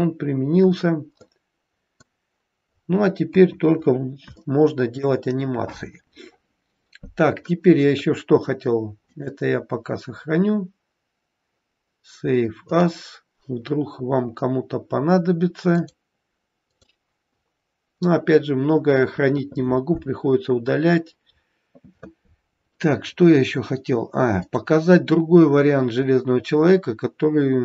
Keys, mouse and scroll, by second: 0.0 scroll down 1, 0.8-1.3 scroll up 2, 1.3 middle click, 2.8-3.1 scroll down 3, 3.3 KP_1, 3.9-4.3 scroll down 2, 4.4 shift+middle click, 6.1-7.0 scroll up 2, 9.0 click, 24.3 click.